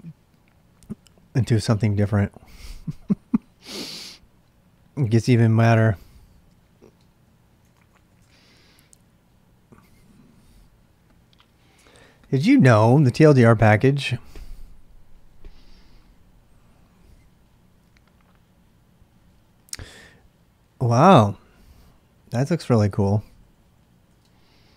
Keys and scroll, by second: 5.2-8.4 typing, 23.1-24.7 typing.